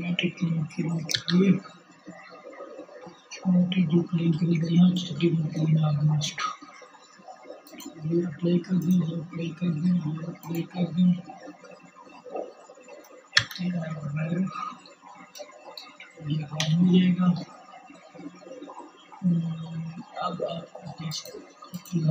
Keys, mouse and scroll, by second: 6.2-9.9 drag, 12.8-19.7 drag, 15.0 KP_1.